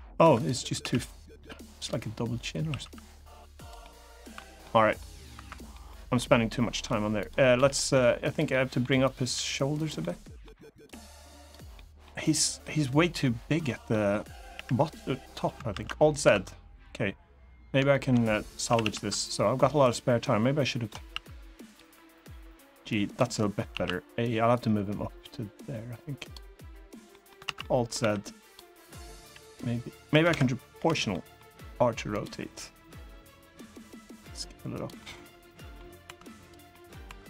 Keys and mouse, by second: 0.1 click, 0.5 s, 1.5 click, 2.2 s, 2.5 x, 3.3 click, 3.5 middle click, 4.3 middle click, 5.1 3, 5.2 click, 5.4 middle click, 5.9 middle click, 7.3 g, 8.0 click, 8.2 middle click, 8.8 click, 9.0 g, 9.5 click, 9.7 middle click, 11.1 click, 11.1 g, 11.5 middle click, 12.3 middle click, 13.4 middle click, 14.3 KP_1, 15.5 alt+z, 16.0 1, 17.6 shift+middle click, 18.4 a, 18.5 a, 19.6 ctrl+right click, 20.8 s, 21.4 click, 21.5 g, 22.8 click, 23.4 a, 24.3-26.1 drag, 26.8 middle click, 27.2 alt+z, 27.3 middle click, 27.7 3, 28.2 click, 28.9 g, 29.8 right click, 30.0 Escape, 30.5 o, 30.8 middle click, 31.2 r, 31.8 click, 32.0 g, 34.5 click, 34.7 middle click, 36.1 2, 36.4 middle click, 36.8 2, 37.1 1.